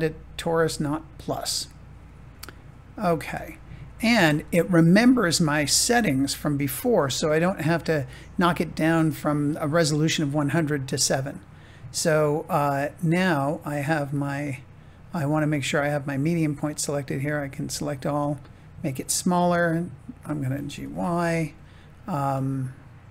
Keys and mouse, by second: 3.5 shift+middle click, 4.7 middle click, 11.8-13.3 middle drag, 14.1-17.0 drag, 17.0 a, 17.5 s, 19.2 click, 20.1 g, 20.7 y, 21.9 click, 22.4-23.1 middle drag.